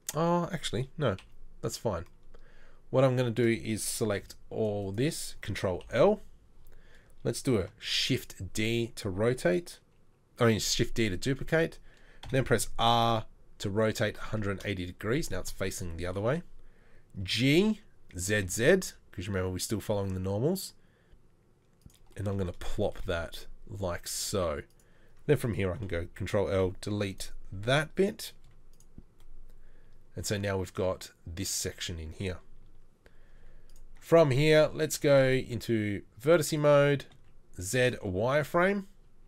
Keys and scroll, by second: 1.2 KP_3, 4.2 c, 5.9 ctrl+l, 7.8 shift+d, 12.3 r, 17.2 g, 25.8 ctrl+l, 26.5 Delete, 28.5 z, 33.4 z, 35.3 1, 37.2 z, 37.7 z.